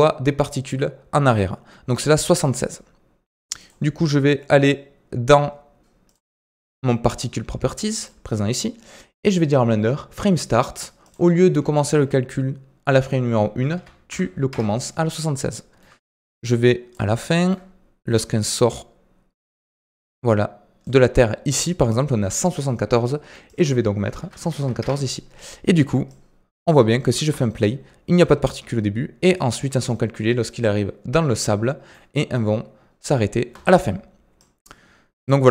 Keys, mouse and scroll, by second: 3.5 click, 6.0 click, 7.9 click, 10.9-14.1 drag, 15.1 scroll down 3, 15.5-16.4 shift+middle drag, 16.4-17.1 drag, 17.1-18.1 shift+middle drag, 18.1-21.6 drag, 23.4-25.4 drag, 25.4 scroll down 2, 26.0 click, 26.8-33.4 shift+middle drag, 33.4 space, 34.3-35.5 drag.